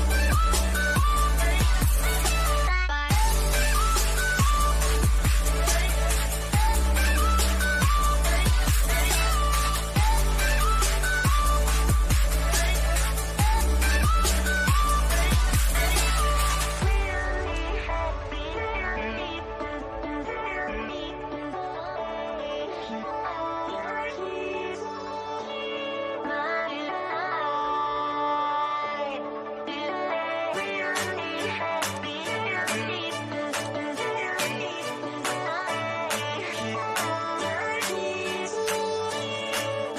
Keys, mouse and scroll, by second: 11.8 click, 14.1 click, 17.4-19.1 middle drag, 19.1-19.4 scroll down 1, 20.0-22.4 shift+middle drag, 22.4-22.9 scroll up 1, 22.9 middle click, 25.3-26.4 scroll down 1, 27.4 scroll up 1, 29.8 scroll down 1, 30.9 click.